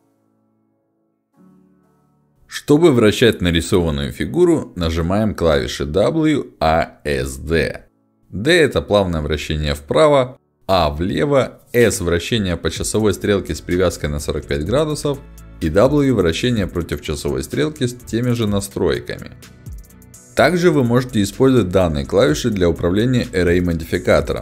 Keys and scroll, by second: 6.0 d, 9.3 a, 11.6 s, 15.6 w, 19.6 d.